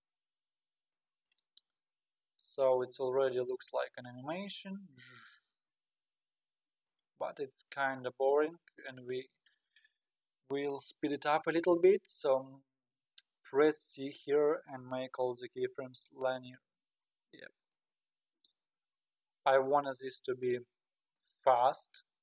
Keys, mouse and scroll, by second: 0.0-0.9 scroll down 8, 0.9-1.5 middle drag, 1.5-1.9 scroll up 4, 1.9-3.1 scroll down 2, 3.1 scroll down 3, 3.3-10.0 drag, 13.8 t, 17.7-20.8 drag.